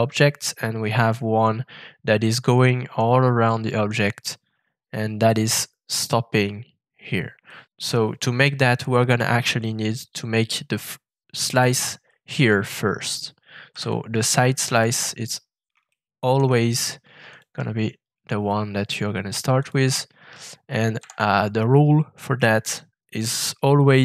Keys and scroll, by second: 13.7 f, 21.0 shift+v.